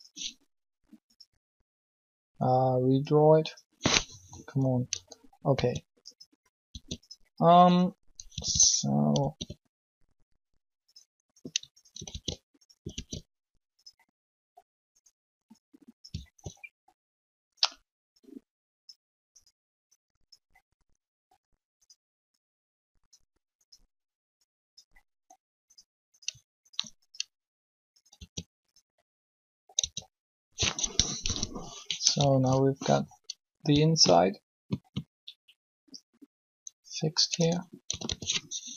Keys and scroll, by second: 5.5 s, 6.7 s, 9.2 alt+s, 12.1 alt+shift+s, 12.9 alt+s, 28.1 s, 29.7 Tab, 31.2 3, 37.3 Tab, 37.8-38.7 typing.